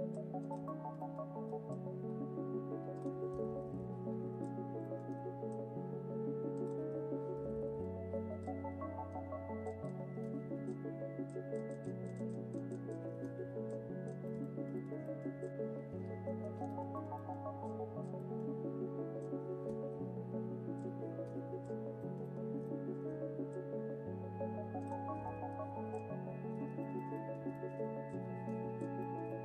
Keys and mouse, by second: 0.1 c, 1.8 c, 4.4 x, 5.4 c, 8.5 x, 9.4 c, 10.1 click, 10.5 ctrl+l, 10.7 x, 11.7-13.5 drag, 13.5 ctrl+l, 13.7 x, 16.9 middle click, 17.6-19.2 middle drag, 17.9-19.0 drag, 17.9 right click, 18.4 right click, 19.6 click, 19.9 ctrl+l, 20.3 x, 21.1 click, 21.5 ctrl+l, 21.7 x, 22.3 middle click, 23.4 c, 26.0 x, 26.9 Tab, 28.2 Tab, 28.4 ctrl+click, 28.7 ctrl+l, 28.9 x.